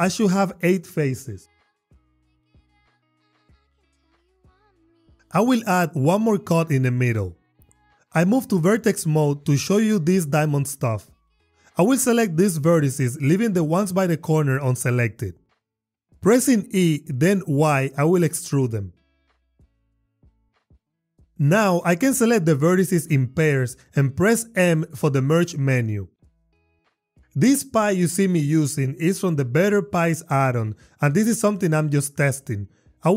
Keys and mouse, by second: 0.1 click, 1.4 click, 2.4 click, 2.6 click, 2.9 click, 3.6 click, 5.4 ctrl+r, 5.8 click, 6.7 click, 7.9 Tab, 13.7 shift+click, 14.8 shift+click, 16.7 e, 18.1 y, 21.8 click, 22.9 click, 24.7 m.